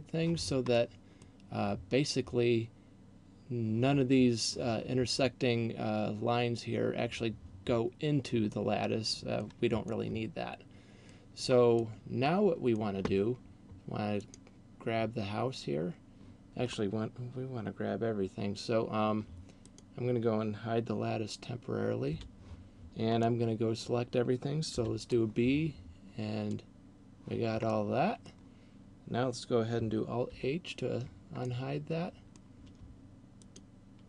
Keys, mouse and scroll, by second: 0.8 middle click, 8.6 middle click, 9.8 middle click, 11.8 middle click, 14.3 right click, 19.8 right click, 22.3 h, 23.1 middle click, 24.8 b, 27.6 middle click, 30.3 alt+h, 31.3 middle click, 33.3 shift+right click.